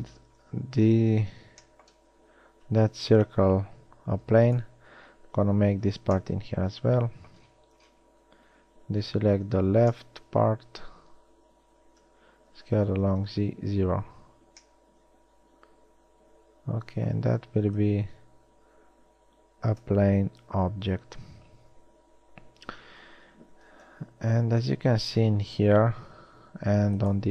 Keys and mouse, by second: 3.3 b, 6.0 z, 9.6 z, 10.1 b, 12.2 z, 12.7 s, 17.0-18.1 middle drag, 18.1 click, 20.1-24.1 middle drag, 24.1 KP_1.